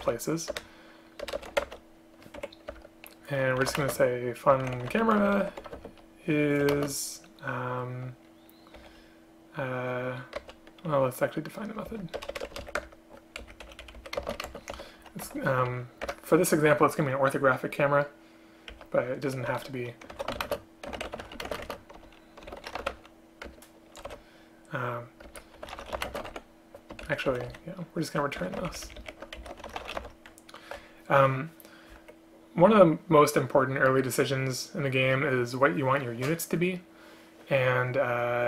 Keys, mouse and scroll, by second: 0.6 BackSpace, 1.3 BackSpace, 1.4 BackSpace, 2.4 Escape, 2.7 Return, 4.0 Return, 5.1 space, 5.8 space, 6.8 space, 10.4 BackSpace, 12.2 BackSpace, 12.4 BackSpace, 12.5 BackSpace, 12.8 Return, 13.5 Up, 13.7 End, 13.9 Left, 14.0 Left, 14.2 space, 16.1 Return, 18.8 Down, 20.5 space, 21.5 space, 21.7 space, 23.5 Return, 25.4 Return, 26.1 space, 27.1 shift+Up, 27.4 shift+End, 27.6 Delete, 28.5 Home, 28.8 ctrl+shift+Right, 28.9 ctrl+shift+Right, 29.1 ctrl+shift+Right, 29.5 shift+Left.